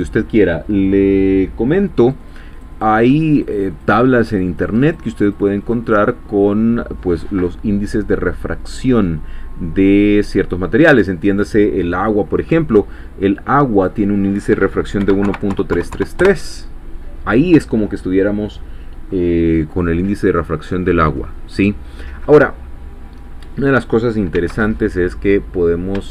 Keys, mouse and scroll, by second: 2.0 click, 2.6-6.1 drag, 7.4-8.9 middle drag, 9.8 click, 13.7 click, 15.0 1, 15.2 ., 15.5 3, 16.2 Return, 22.8-23.2 scroll down 2, 24.0 click, 24.4 x, 24.6 click.